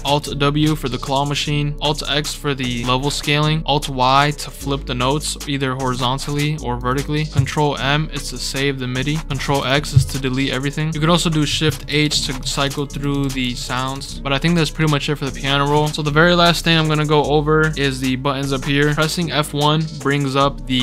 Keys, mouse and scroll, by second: 0.0 alt+w, 1.7 click, 3.0-3.4 scroll down 4, 5.9 click, 6.3 click, 6.8 click, 7.0 click, 9.4 ctrl+x, 11.7-14.0 typing.